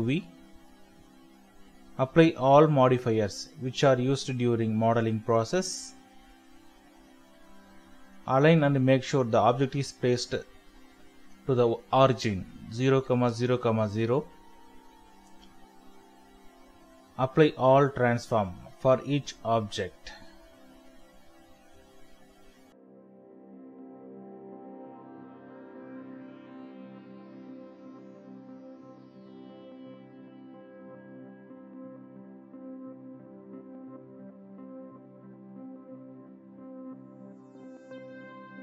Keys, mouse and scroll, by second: 4.5-5.2 scroll up 1, 5.4 shift+middle click, 6.8 double click, 37.1 middle click.